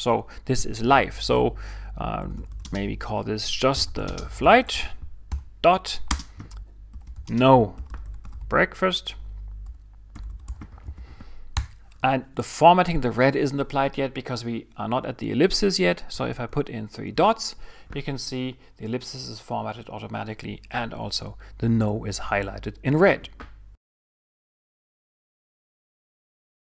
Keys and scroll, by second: 2.0-5.3 typing, 6.7-11.3 typing, 11.5 Return, 16.1-16.5 typing.